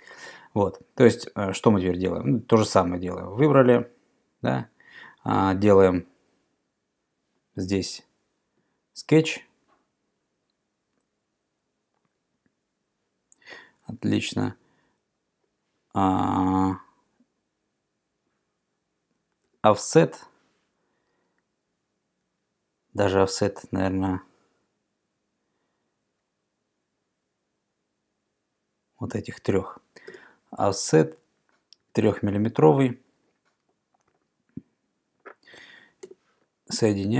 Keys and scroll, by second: 19.5 o, 22.3 Escape, 30.1 o, 31.9 3, 34.1 Return, 36.1 |.